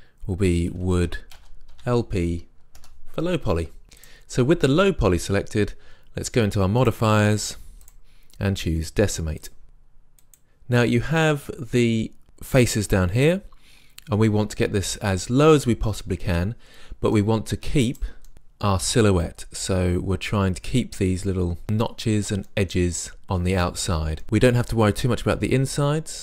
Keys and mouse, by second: 0.9 o, 1.5-4.0 middle drag, 4.0-5.7 drag, 5.7 middle click, 6.8-9.6 drag, 10.3-12.1 drag, 18.3-22.1 middle drag, 22.5 middle click, 23.2-24.6 middle drag, 25.7-26.2 middle drag.